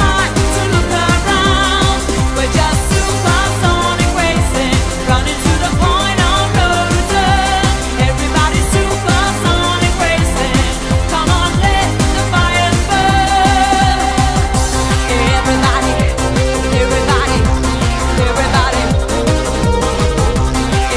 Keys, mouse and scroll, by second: 0.2 click, 1.0 click, 1.1 scroll down 2, 1.2 right click, 1.5 middle click, 1.8 middle click, 2.1 scroll up 1, 2.2 middle click, 2.5 scroll down 1, 2.6 ctrl+right click, 2.8 ctrl+right click, 3.0 right click, 3.2 scroll up 1, 3.3 right click, 3.7 click, 3.8 click, 4.4 scroll down 3, 4.7 right click, 5.0 right click, 5.2-5.6 scroll up 4, 5.6 middle click, 5.8 ctrl+right click, 6.0 right click, 6.5 click, 6.9 middle click, 7.1 right click, 7.3 scroll up 2, 7.4 ctrl+right click, 7.4 scroll down 6, 7.7 right click, 7.9 shift+right click, 8.2 middle click, 8.4 scroll down 2, 8.4 middle click, 8.6 scroll up 5, 8.7 right click, 8.9 ctrl+right click, 9.1 shift+right click, 9.3 right click, 9.8 click, 10.6 shift+right click, 10.9 right click, 11.1 middle click, 11.4 right click, 11.5 scroll down 3, 11.6 scroll up 4, 11.7 middle click, 11.9 right click, 12.0 shift+right click, 12.2 right click, 12.5 click, 12.7 click, 12.7 middle click, 12.9 right click, 13.1 ctrl+right click, 13.3 right click, 13.5 shift+right click, 13.7 right click, 14.1 click, 14.7 middle click, 14.9 right click, 15.2 middle click, 15.5 ctrl+right click, 15.7 right click, 16.0 shift+right click, 16.3 right click, 16.4 middle click, 16.5 right click, 17.1 click, 17.6 middle click, 17.6-18.1 scroll down 4, 18.2 right click, 18.3 ctrl+right click, 18.5 shift+right click, 18.8 shift+right click, 19.0 middle click, 19.2 scroll up 2, 19.3 right click, 19.6 shift+right click, 19.9 shift+right click, 20.0 ctrl+right click, 20.2 right click, 20.6 click, 20.8 middle click.